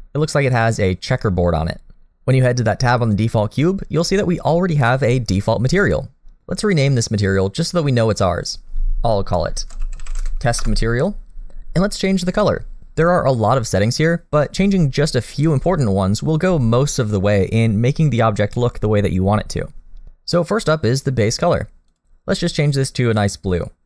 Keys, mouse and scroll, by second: 8.1 click, 21.9 click.